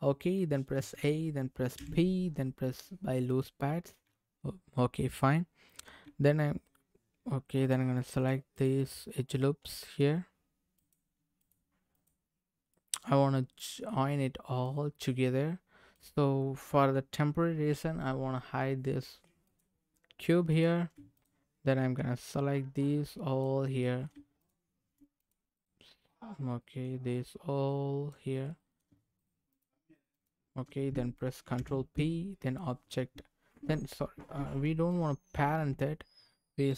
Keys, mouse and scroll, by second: 0.7 a, 1.7 p, 4.0 Tab, 5.7 click, 6.0 Tab, 7.6 click, 8.2 click, 8.5 click, 9.7 middle click, 10.7 click, 11.4 click, 11.9 click, 12.7-13.9 middle drag, 14.6 click, 15.3-15.7 scroll up 1, 15.9 click, 19.4 click, 20.5 click, 21.1 shift+click, 22.2-23.4 drag, 23.8 middle click, 24.4 shift+click, 25.2 click, 26.0 middle click, 27.2 click, 28.5 middle click, 29.5 shift+click, 30.1 shift+click, 32.1 ctrl+p, 34.7 ctrl+shift+z, 35.3 ctrl+z.